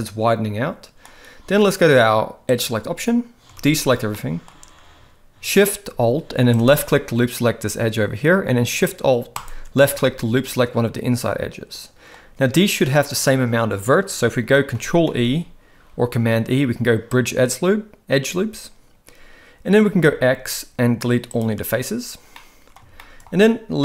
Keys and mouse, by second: 2.5 click, 3.6 alt+a, 4.1 middle click, 9.4 alt+shift+click, 10.0-12.1 middle drag, 15.0 ctrl+e, 20.0 x, 22.4-22.8 middle drag, 23.0 shift+middle drag.